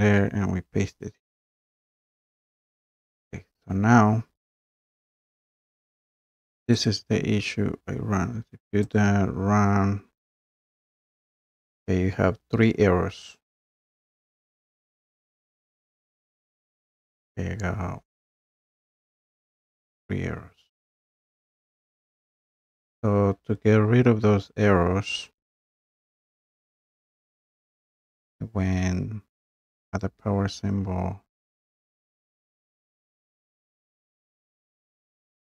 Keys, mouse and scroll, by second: 0.3 scroll, 1.6 click, 2.8 click, 3.5-4.1 scroll, 6.9 click, 9.0 click, 18.8 click, 21.7 click, 22.4-23.5 scroll, 30.0 click, 31.1-35.5 drag.